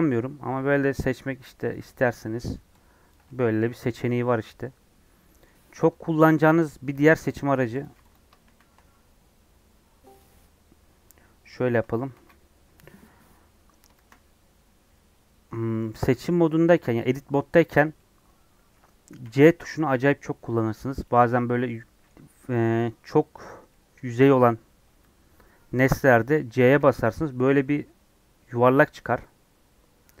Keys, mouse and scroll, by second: 1.7 click, 3.1-5.2 ctrl+drag, 5.2 middle click, 5.7 Tab, 5.9 scroll down 2, 6.1-7.8 middle drag, 7.8 click, 8.1 x, 10.1 shift+a, 10.4 scroll down 2, 10.6-11.3 scroll up 8, 11.7 z, 12.7 scroll down 2, 13.0 scroll up 1, 13.6 scroll up 1, 13.9 shift+middle click, 14.3 Tab, 14.9 3, 16.1 click, 17.9-20.9 middle drag, 20.9 c, 21.6-30.2 middle drag.